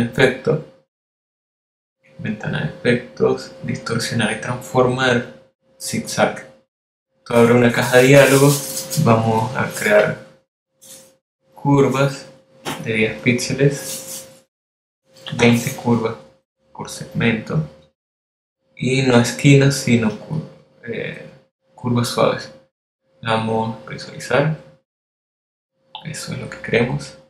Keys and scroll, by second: 16.0-16.9 typing.